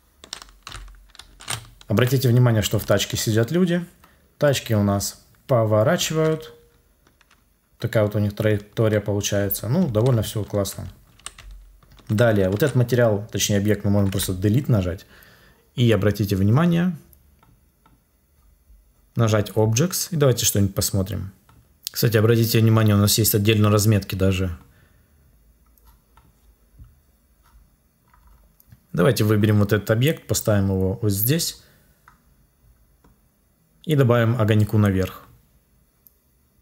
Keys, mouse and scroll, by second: 14.0 Delete.